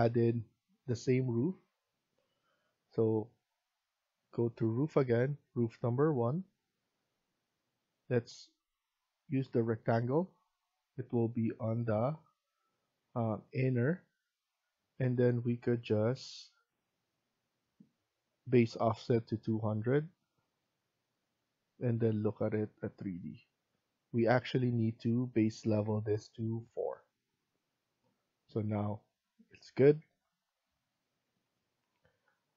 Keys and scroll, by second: 15.8 Escape, 16.2 Escape, 29.6 Escape, 30.0 Escape.